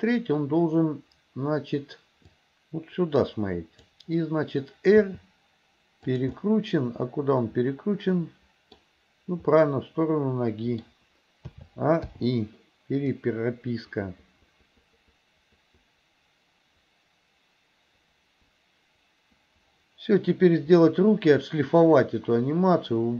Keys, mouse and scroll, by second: 2.5-3.9 drag, 5.0 r, 6.4-8.8 middle drag, 9.7-10.9 middle drag, 11.6 a, 12.1 i, 13.2-23.1 drag.